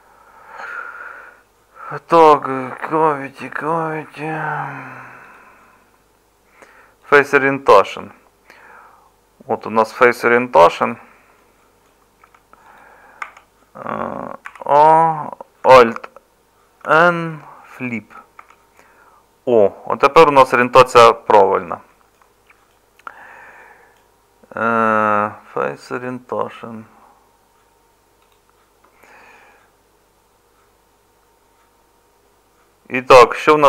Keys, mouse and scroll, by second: 12.2 Tab, 13.2 Tab, 14.5 a, 16.8 alt+n, 18.4 Tab.